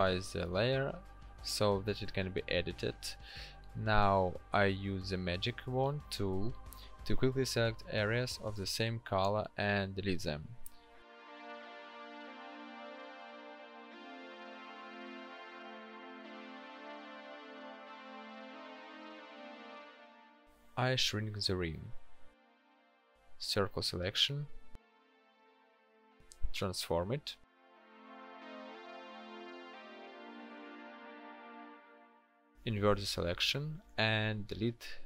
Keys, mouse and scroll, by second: 19.4 ctrl+t, 22.6 alt+shift+click, 34.1 ctrl+shift+i.